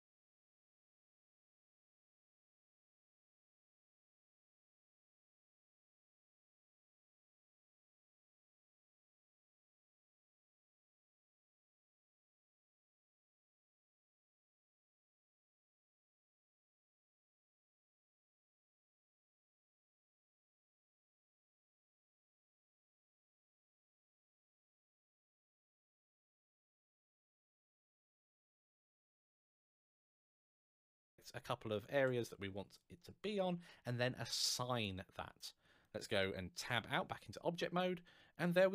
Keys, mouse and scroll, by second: 31.5 alt+shift+click, 32.8 shift+scroll up 2, 36.4 Tab, 36.9 scroll down 1, 37.5 scroll up 1, 37.9 middle click.